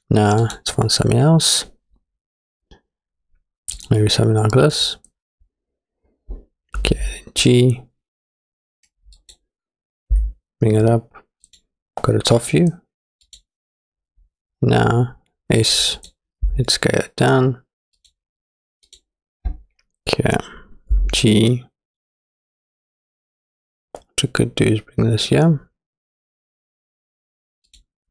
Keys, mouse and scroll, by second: 0.5-3.9 drag, 4.7 click, 6.9 g, 10.1 g, 12.4 click, 13.3 click, 13.4 middle click, 14.2-14.6 scroll up 2, 14.6-16.0 scroll down 2, 16.0 click, 16.5 s, 18.9 click, 21.0 g.